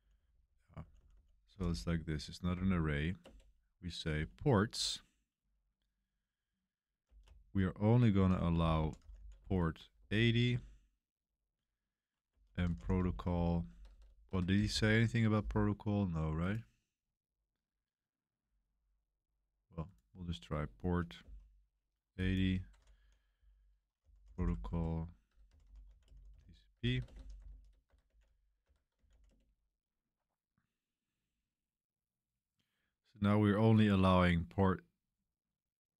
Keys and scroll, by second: 0.0-2.5 typing, 3.1 Return, 7.0-9.9 typing, 10.4 Return, 12.0-14.6 typing, 14.2 Home, 16.1-16.9 typing, 21.1 o, 22.6-29.5 typing.